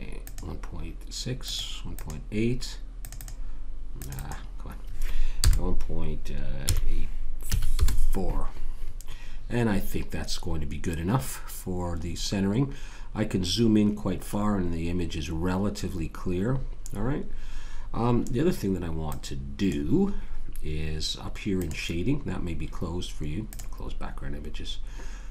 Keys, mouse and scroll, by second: 12.0-13.1 scroll up 1, 13.1-14.4 scroll up 1, 14.4-15.0 scroll up 1, 15.8-16.4 scroll down 1, 16.4 scroll down 1, 19.1-23.4 drag, 23.5-25.3 drag.